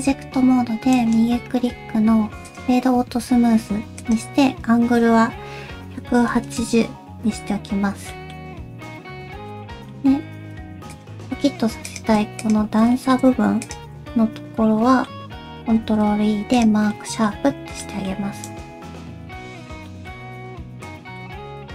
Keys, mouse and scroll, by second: 0.9 right click, 8.1 middle click, 8.6 Tab, 9.1 scroll up 1, 9.5 middle click, 10.3 2, 10.9 click, 11.9 click, 12.4 shift+click, 12.9 middle click, 13.6 shift+click, 14.1 middle click, 15.8 ctrl+e, 16.9 middle click, 17.4 Tab, 17.6 scroll down 2, 17.8 middle click, 18.5 right click, 19.9 middle click, 20.2 q, 21.2 middle click.